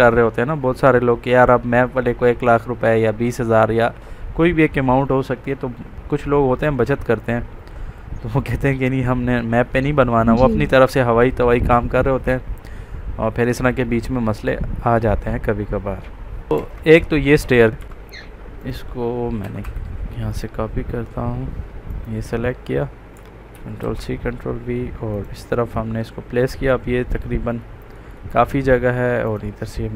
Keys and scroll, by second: 16.7 Escape, 17.8 Escape, 23.5 ctrl+c, 23.7 ctrl+v.